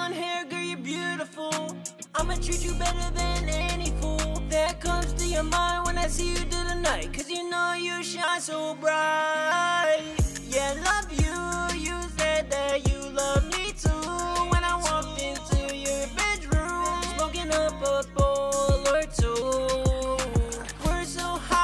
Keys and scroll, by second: 8.3 ctrl+super+w, 12.0 super+s, 12.2 super+Tab, 17.0 super+Tab.